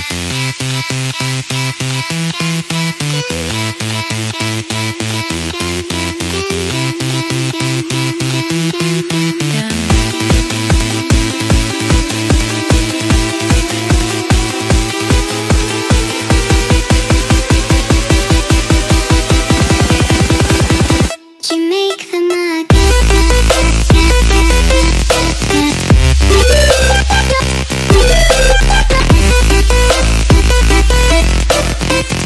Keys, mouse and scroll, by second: 2.6 click, 4.7 click, 5.4 click, 6.1 click, 7.3 click, 8.7 click, 10.5 click, 11.3 click, 11.8 click, 13.2 click, 13.9 click, 14.2 click, 14.6 click, 15.7 click, 16.4 click, 17.3 click, 20.0 click, 21.9 click, 23.2 click, 23.6 click, 23.8 click, 29.4 click, 30.2 click, 30.9 click.